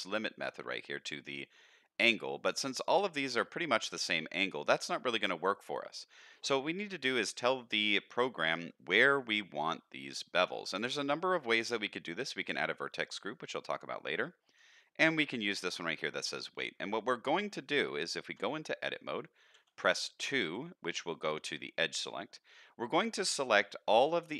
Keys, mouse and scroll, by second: 2.5 middle click, 3.5 scroll down 2, 8.5 middle click, 11.4-16.2 drag, 16.2 click, 16.9 middle click, 17.4 middle click, 18.4 Tab, 19.5 2, 23.4 middle click, 24.2 alt+click.